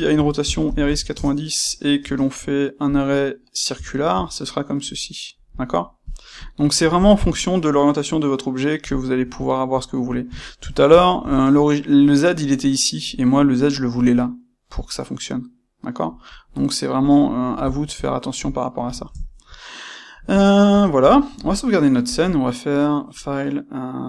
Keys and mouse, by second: 1.1 KP_Enter, 2.0 space, 6.3 click, 6.9 shift+click, 9.3-16.3 shift+middle drag, 16.3 drag, 16.5-22.0 middle drag, 22.0-24.0 drag.